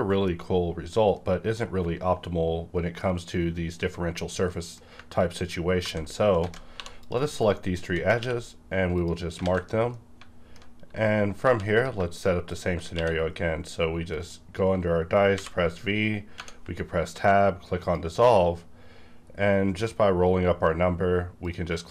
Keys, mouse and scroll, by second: 4.5 middle click, 5.7 ctrl+z, 6.4 alt+a, 6.7 2, 6.9 click, 7.3 shift+click, 8.9 click, 8.9 q, 9.4 alt+a, 9.9-11.3 middle drag, 11.3 3, 11.8 click, 12.1 shift+click, 12.9 q, 14.1 click, 15.3 v, 16.3 Tab, 17.8 click, 19.2-20.4 scroll up 1, 20.4-20.7 scroll down 1, 20.7-21.4 scroll up 1, 21.4 click, 21.6 click.